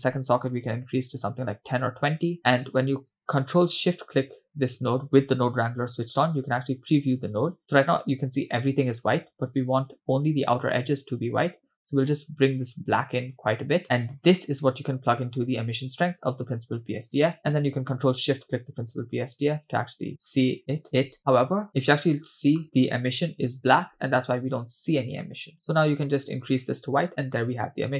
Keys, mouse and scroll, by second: 3.0 click, 4.1 ctrl+shift+click, 9.8-13.4 drag, 14.2-16.3 drag, 17.2 click, 18.6 ctrl+shift+drag, 25.5 click.